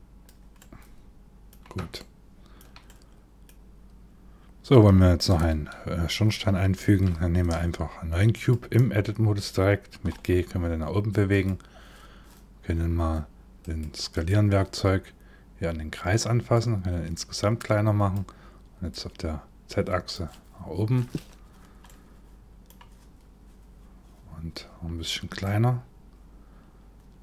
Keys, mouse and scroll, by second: 0.2 middle click, 1.6 shift+middle click, 2.5 middle click, 6.4 shift+a, 9.7 g, 13.2 click, 13.7 click, 16.2 click, 18.5 click, 21.5 middle click, 25.0 click.